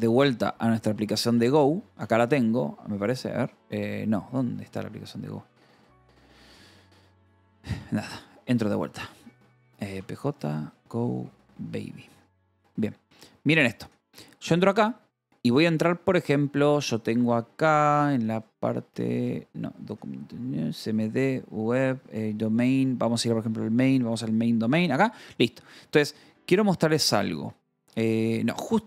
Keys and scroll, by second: 0.0-7.0 typing, 4.6 Escape, 7.9 Return, 8.3-28.8 typing, 16.2 Return, 19.4 Return, 20.3 Return, 20.9 Return, 23.3 Return, 23.9 Return.